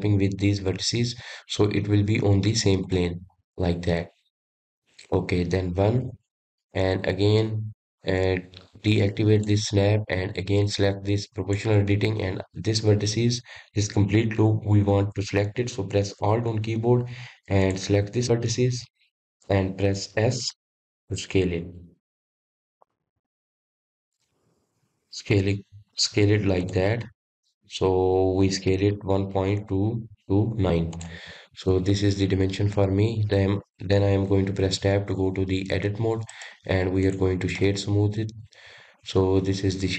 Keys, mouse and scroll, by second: 4.1-6.7 middle drag, 6.7 KP_1, 10.1 click, 12.1 click, 18.3 alt+click, 21.5 s, 31.8 click, 32.3-35.4 middle drag, 35.5 Tab, 36.1-37.1 scroll down 2, 37.1-38.2 right drag, 38.2 scroll down 1, 38.4-39.9 middle drag.